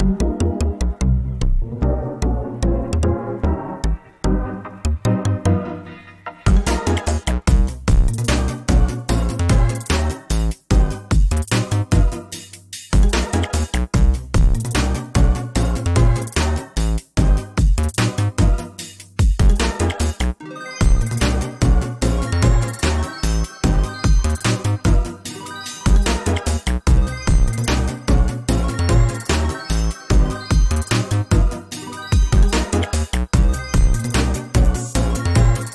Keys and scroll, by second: 2.7 ctrl+space, 5.2 ctrl+space, 10.5 ctrl+z, 20.7 ctrl+space, 26.8 ctrl+space, 27.7 ctrl+space, 31.0 ctrl+space.